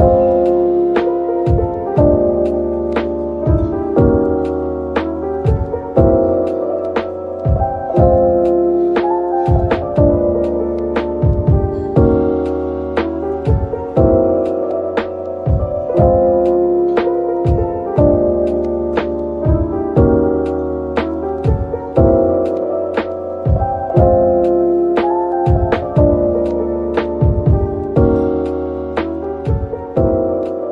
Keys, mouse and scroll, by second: 1.4 typing, 3.0 Tab, 3.4 middle click, 4.3 Tab, 7.1 ctrl+r, 8.1 double click, 8.5 ctrl+r, 8.9 scroll up 1, 9.5 double click, 10.8-12.0 typing, 12.2 shift+click, 13.4-15.5 typing, 15.9 double click, 16.4 shift+click, 17.8 typing, 19.7 typing, 20.4 double click, 20.8 middle click, 21.1 Tab, 21.5-21.9 scroll down 1, 21.9 middle click, 26.0 shift+right click, 26.5 shift+a, 29.3-29.6 scroll down 1.